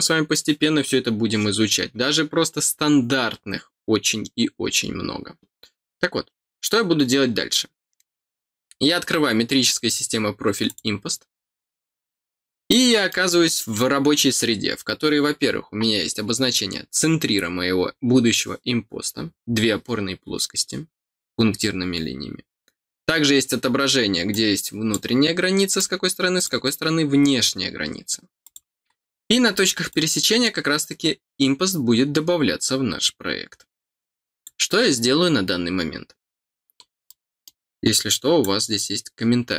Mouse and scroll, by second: 10.6 click, 12.3 scroll down 2, 12.6 middle click, 24.3 click, 25.7 click, 28.4 click, 29.2 scroll up 2, 29.9-34.4 drag, 36.7 scroll down 2, 37.0 middle click, 38.4-39.5 drag.